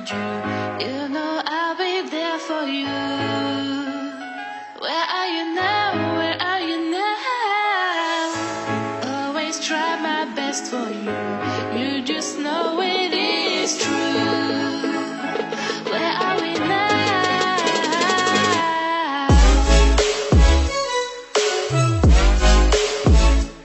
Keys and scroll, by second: 5.2 ctrl+0.